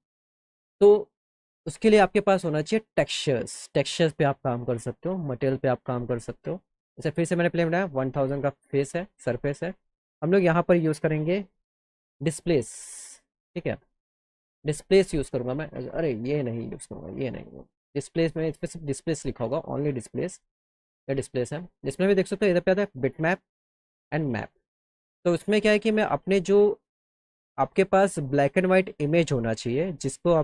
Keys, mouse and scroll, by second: 1.5 click, 4.5-7.1 drag, 9.1 click, 9.9 click, 12.3 f, 13.2 scroll up 2, 14.9 click, 16.7 click, 17.6 click, 18.1 f, 19.1 d, 20.3 click, 25.2 click, 28.2 click, 29.8 click.